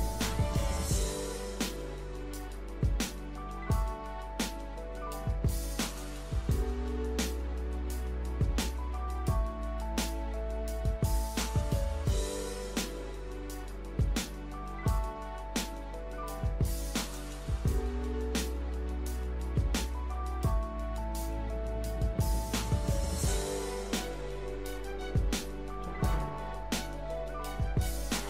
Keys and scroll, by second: 5.4-5.8 scroll down 2, 6.0-6.4 scroll up 2, 10.5 KP_0, 11.1 KP_Decimal, 11.6 KP_5, 21.2 KP_3.